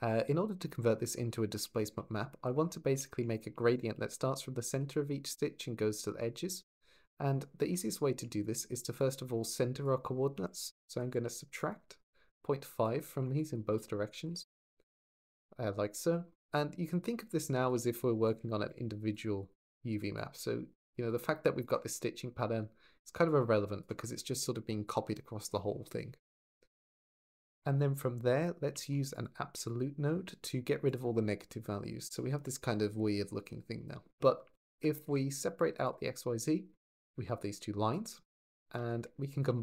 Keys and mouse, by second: 0.4 shift+middle drag, 1.5-2.0 shift+middle drag, 2.0 drag, 3.4 shift+middle drag, 3.9-6.4 d, 5.1 click, 7.5 shift+d, 8.8 click, 11.8 click, 12.6 click, 13.2-14.3 drag, 17.4 shift+a, 19.9 click, 26.6 click, 26.9 x, 26.9 click, 28.7 shift+d, 28.9 click, 29.4-30.8 drag, 34.3 shift+a, 35.6 click, 37.1 click, 37.7 click, 38.3 shift+a.